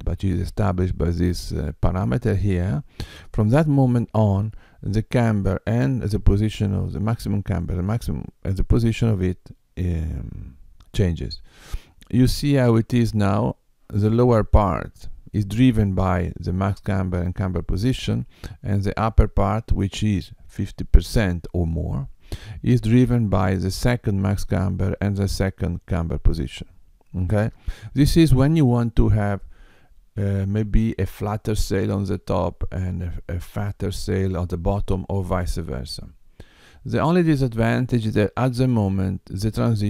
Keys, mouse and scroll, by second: 7.7 middle click.